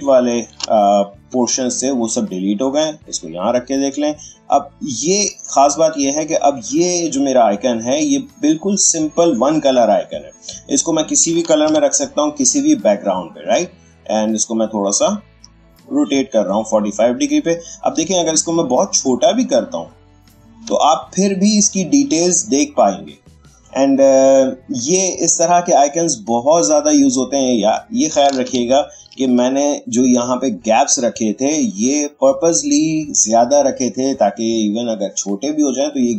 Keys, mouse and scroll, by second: 3.5 space, 3.8-9.2 drag, 9.2 click, 11.6 ctrl+z, 13.3-20.1 drag, 20.6 space, 20.9 click, 21.2 space, 24.1-26.1 drag, 28.5 ctrl+z, 29.7 click, 31.0 space, 31.2 click, 31.5 space.